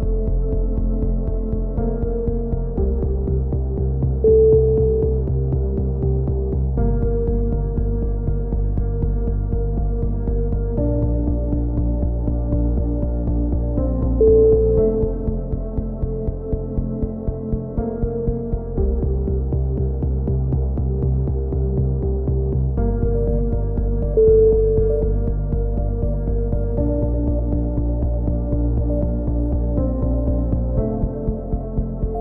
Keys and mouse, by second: 1.5-2.2 middle drag, 3.2-3.8 middle drag, 5.4 Tab, 5.6-6.3 drag, 6.3 KP_1, 7.3 z, 8.6 z, 8.7 z, 9.6 c, 11.2-12.8 drag, 11.2 c, 13.3-15.8 typing, 16.3 ctrl+r, 16.9 z, 17.1 a, 18.1-19.0 right drag, 18.5 click, 19.2 a, 19.3 z, 19.5 z, 19.8 click, 21.8 ctrl+KP_7, 28.4 Tab, 30.1 KP_3, 30.4 z, 30.7 z, 31.0 Tab, 31.8-32.2 drag.